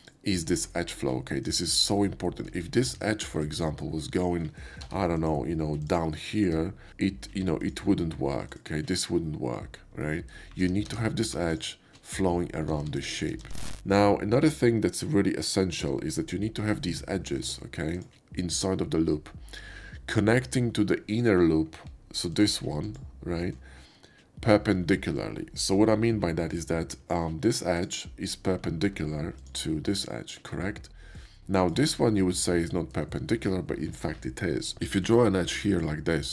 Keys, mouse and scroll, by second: 0.0 click, 0.5 Tab, 1.4 alt+click, 2.0 alt+click, 3.1 shift+middle click, 3.5-5.3 shift+drag, 4.8 ctrl+r, 5.8 click, 6.3 Tab, 6.9 ctrl+z, 7.6 ctrl+click, 8.5 ctrl+click, 10.0 ctrl+middle click, 10.6 ctrl+z, 10.9 ctrl+z, 11.5 alt+click, 12.8 ctrl+z, 13.3 ctrl+z, 17.4 Tab, 17.9 click, 22.3 alt+click, 22.8 alt+click, 27.7 click, 29.4 alt+click, 29.9 alt+click, 31.5 alt+click, 34.9 click, 36.0 ctrl+z.